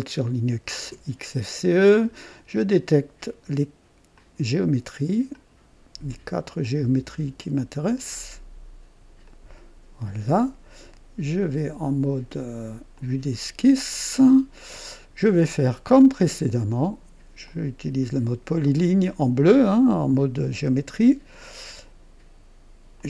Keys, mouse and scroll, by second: 2.0 click, 4.1 click, 5.3 click, 7.8 click, 9.2 click, 12.9 click, 13.9 right click, 17.4 click, 20.0 scroll up 1, 20.6 right click, 22.9 click.